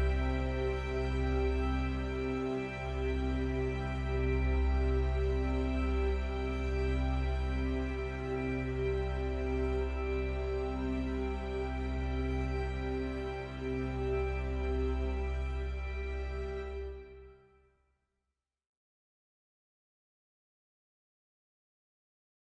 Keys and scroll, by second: 11.9 ctrl+j, 12.3 ctrl+t.